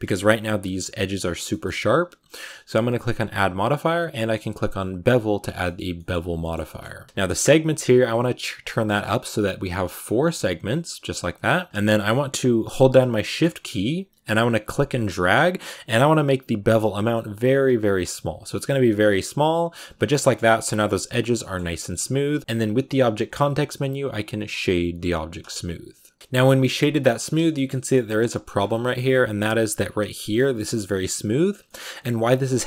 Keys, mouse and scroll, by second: 0.0-1.4 scroll up 1, 1.4-5.0 shift+middle drag, 5.0 click, 5.3 scroll down 1, 5.5-8.0 shift+middle drag, 8.0-17.1 drag, 19.9 scroll down 3, 20.0 middle click, 20.2-21.3 scroll up 5, 21.3 middle click, 21.5 scroll down 1, 21.6 middle click, 22.4 right click, 25.4 w, 26.2-28.0 middle drag, 28.0 a, 28.3 shift+middle click, 28.4-31.3 scroll up 5, 31.3 scroll down 3, 31.5 shift+middle click, 31.9 scroll up 1, 32.5 shift+middle click.